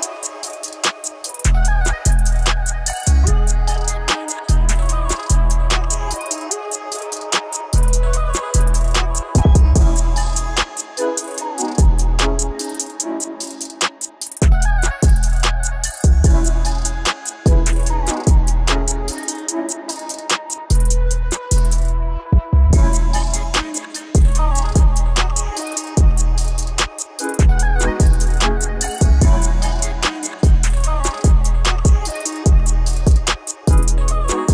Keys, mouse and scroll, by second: 11.3-15.5 drag, 15.5 middle click, 17.3-17.8 scroll up 1, 18.5-25.0 drag, 25.0 middle click, 27.3-34.5 drag.